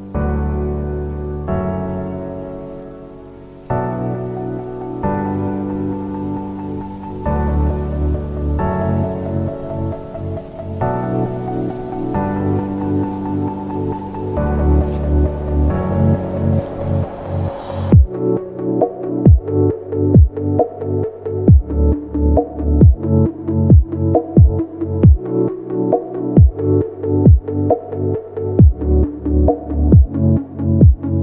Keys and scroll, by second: 2.4 shift+F2, 28.8 g.